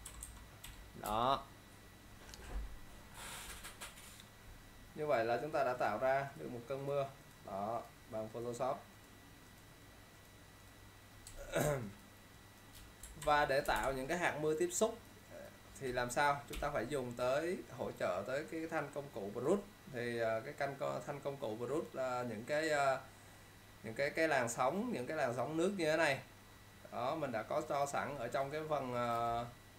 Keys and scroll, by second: 0.1 -, 0.8 =, 1.2 space, 13.3 ctrl+0, 13.8 space.